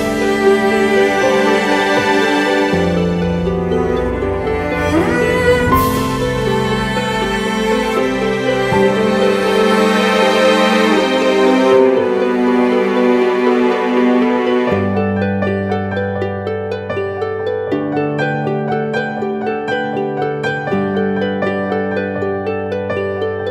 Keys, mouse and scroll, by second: 1.8 alt+shift+click, 3.6 alt+shift+click, 8.8 alt+shift+click, 10.4 Up, 10.7 Up, 10.9 Right, 12.4 Left, 19.9 ].